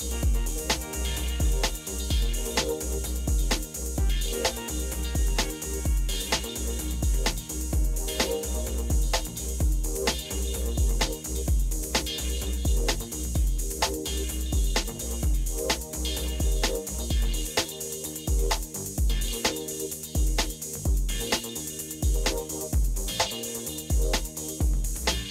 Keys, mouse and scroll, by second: 7.0 space, 12.8 Down, 13.5 Down, 13.6-14.5 Down, 18.7 Down, 19.3-20.4 Down, 23.2 Up, 24.4 Up, 24.7 Up.